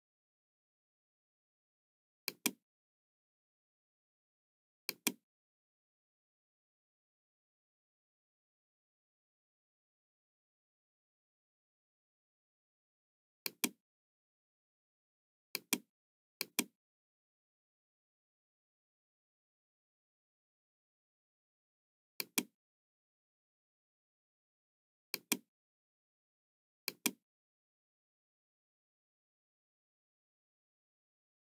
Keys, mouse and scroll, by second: 0.2-0.6 scroll down 2, 1.0 scroll down 2, 2.3 click, 4.7 click, 13.4 click, 15.5 click, 16.4 click, 17.4 KP_4, 17.7 KP_5, 18.5 Return, 19.9 middle click, 21.3 Return, 21.3 KP_5, 21.3 KP_4, 22.1 click, 25.2 click, 26.8 click, 28.2 scroll up 1, 28.2 middle click.